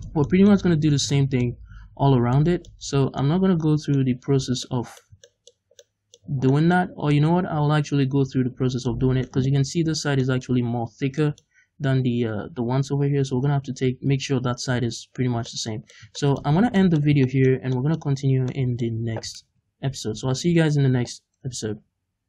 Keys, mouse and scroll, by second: 0.7 a, 2.0 scroll down 2, 2.8-3.2 scroll up 2, 4.3 scroll down 2, 6.8-7.1 scroll up 2, 9.5-10.2 scroll up 2, 10.9 scroll down 2, 15.5-19.5 middle drag, 18.1-18.5 scroll up 2, 19.5 ctrl+s.